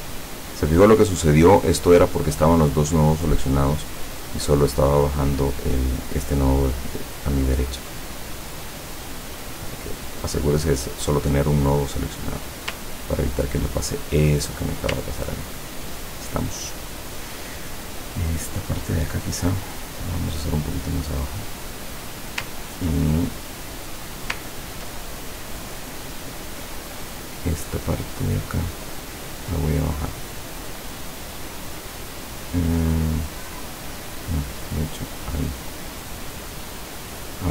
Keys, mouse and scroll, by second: 4.3-4.8 scroll down 2, 7.8 click, 9.8 click, 11.8 click, 12.9-13.5 ctrl+scroll down 2, 13.9-14.6 ctrl+scroll down 2, 14.6-15.4 ctrl+scroll down 2, 18.5 click, 19.3-21.6 drag, 23.4 ctrl+click, 24.5 ctrl+scroll down 2, 28.4 click, 29.1 click.